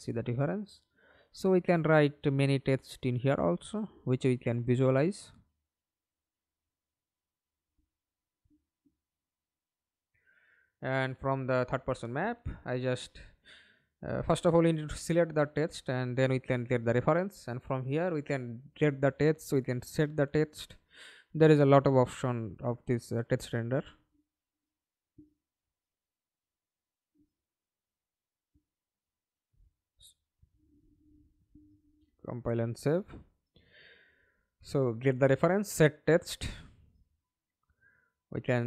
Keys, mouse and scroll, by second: 4.9 scroll down 1, 10.7 right click, 12.1-14.3 scroll up 4, 14.3-15.9 typing, 17.5-18.3 scroll down 1, 18.3-19.2 scroll down 10, 19.2-21.6 scroll up 20, 22.3-25.8 typing, 27.1 BackSpace, 27.6 BackSpace, 28.9 double click, 31.4 Delete, 32.5 right click, 35.0-36.6 typing, 37.1 Up, 37.5 Return.